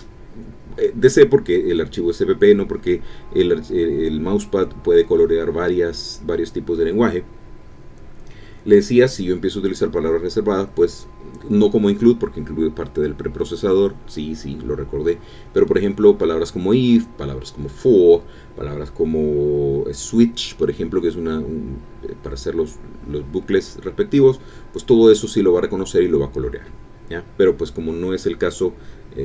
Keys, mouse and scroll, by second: 5.8-9.0 typing, 10.2 BackSpace, 10.9 BackSpace, 14.5-15.5 typing, 16.8-17.7 typing, 21.5-23.5 typing, 25.2 ctrl+Home, 25.6 ctrl+shift+End, 26.2 Delete.